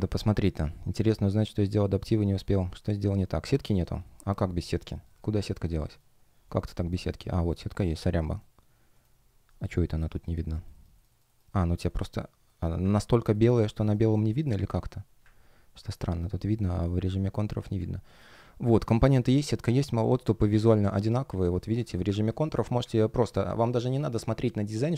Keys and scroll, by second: 2.1-3.1 typing, 6.2 shift+o, 7.2 shift+g, 8.1 shift+g, 13.3 shift+g, 14.3 shift+o, 15.8 shift+o, 16.7 space, 18.6 shift+g, 18.9 shift+o, 21.6 space, 23.6 shift+o, 24.7 shift+o.